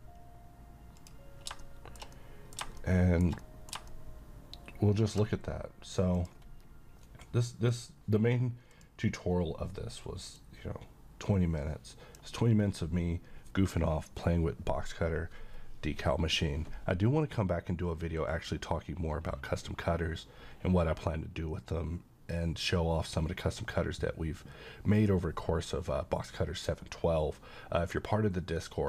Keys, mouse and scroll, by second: 1.0 click, 2.0-2.8 shift+middle drag, 3.9-6.2 middle drag, 6.2 click, 6.2-12.3 drag.